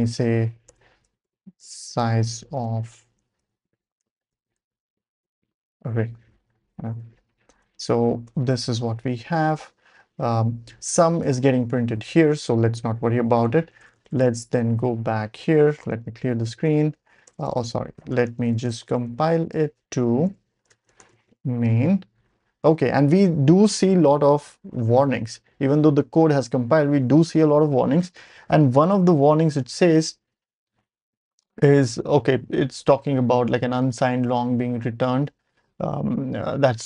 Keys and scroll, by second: 0.0-5.2 typing, 6.1 Right, 6.2 Right, 6.9 ;, 7.5 Return, 8.0 Up, 8.2 Return, 9.0 Down, 9.2 Down, 9.3 Down, 9.5 Down, 9.9 Down, 10.3 Down, 10.6 Down, 10.8 Down, 10.9 Down, 11.1 Down, 11.2 Down, 11.4 Down, 11.5 Down, 13.3 Escape, 13.5-14.6 typing, 15.8 ctrl+l, 16.2-21.6 typing, 27.8 ctrl+alt+super+p.